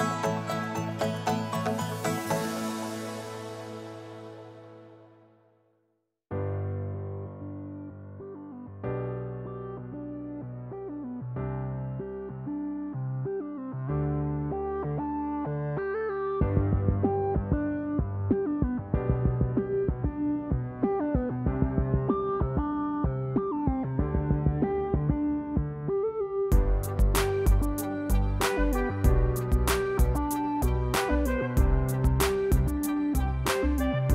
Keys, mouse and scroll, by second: 0.0-0.8 scroll, 2.1 click, 2.1 scroll, 3.4 click, 5.0 click, 5.3 scroll, 6.6 click, 6.6 click, 8.6 click, 9.2 F1, 9.4 click, 10.4 -, 10.6 -, 12.4 -, 14.3 click, 15.2 ctrl+d, 16.2 ctrl+click, 16.5 h, 18.4-19.2 ctrl+click, 19.7 click, 20.3 ctrl+d, 21.1 shift+click, 21.8 ctrl+-, 22.9 click, 23.4 ctrl+d, 24.1 shift+click, 24.8 ctrl+-, 25.8 click, 26.4 ctrl+d, 27.0 shift+click, 27.7 ctrl+-, 28.6 click, 29.2 ctrl+d, 29.8 shift+click, 30.6 ctrl+-, 31.9 click, 33.1 click.